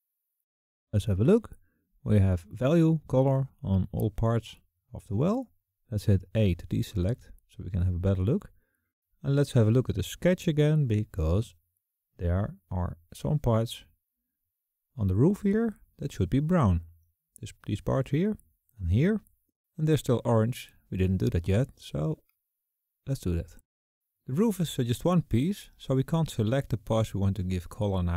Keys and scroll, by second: 5.6 a.